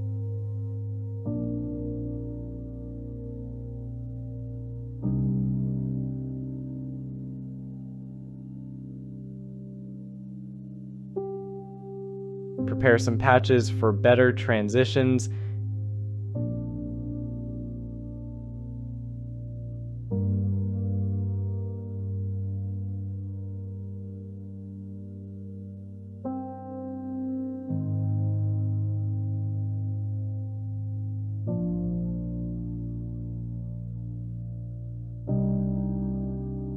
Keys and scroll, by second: 4.3 shift+i, 4.8 Return, 5.4 Delete, 24.2 Return, 27.6 shift+x, 32.1 shift+w, 33.9 Escape, 36.4 shift+w.